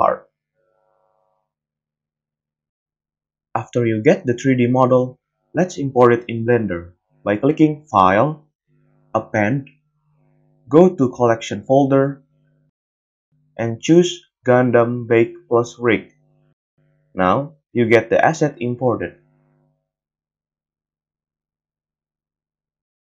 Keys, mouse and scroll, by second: 0.4 middle click, 0.6-4.7 drag, 0.6 g, 1.4 g, 2.5 g, 4.7 middle click, 4.8-10.0 drag, 5.5 x, 14.4-17.3 drag, 18.5-23.1 middle drag, 20.1 z, 21.3 a, 21.5 a.